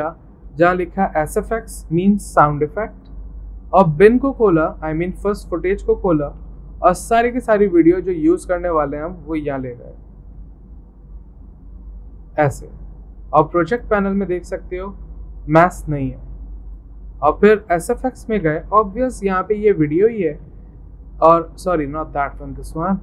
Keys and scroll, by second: 0.0-0.5 typing, 6.2-7.0 typing, 8.6 alt+Tab, 18.5 alt+Tab, 20.3 alt+Tab.